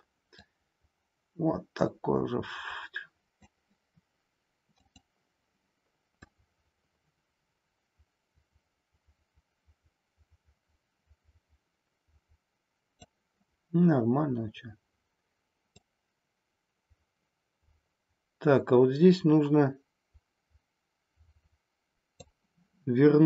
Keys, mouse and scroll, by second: 0.4-3.5 drag, 4.8 click, 6.2-13.1 drag, 15.8-22.3 drag.